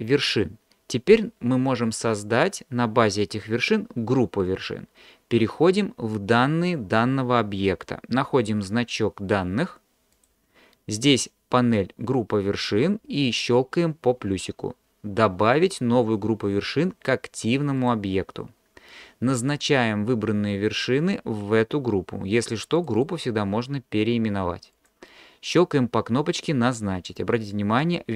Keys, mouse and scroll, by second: 17.8 click, 22.8-24.9 drag.